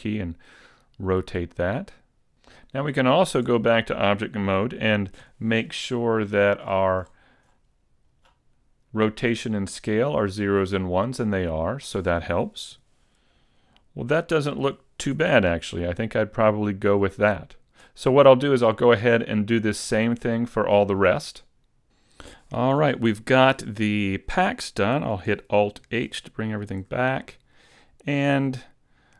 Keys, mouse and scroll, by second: 2.1 click, 3.4 Tab, 5.2 n, 6.0-8.2 scroll up 23, 8.2-8.6 scroll up 10, 12.8 n, 15.0 Tab, 19.2 shift+middle click, 25.9 alt+h, 26.5-27.6 scroll down 5, 26.8 a, 27.6 middle click, 28.4-29.0 scroll down 1, 29.0 scroll down 1.